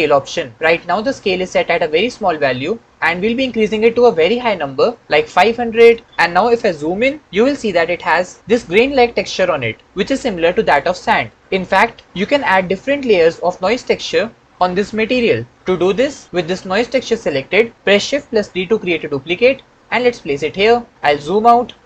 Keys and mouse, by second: 2.9-5.6 drag, 5.4 KP_0, 18.6 shift+d, 20.4 click.